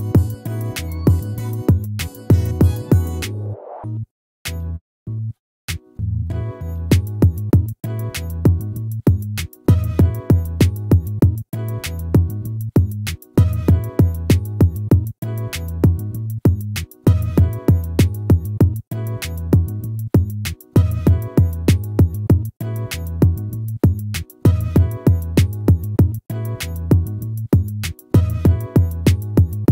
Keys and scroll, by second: 6.6 ctrl+-, 19.3 ctrl+-, 23.2 ctrl+-.